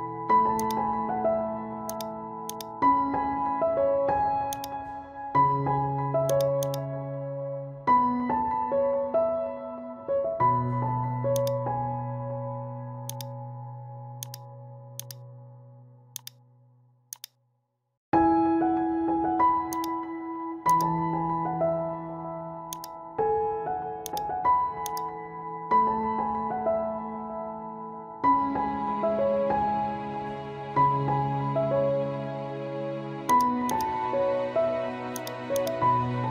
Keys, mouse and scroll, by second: 5.9 right click, 6.3-10.1 drag, 10.1 t, 11.3-14.2 alt+drag, 17.1-18.7 alt+drag, 18.7 ctrl+t, 19.7-28.9 drag, 29.1-31.2 scroll down 1, 31.2 scroll up 1, 33.3 click.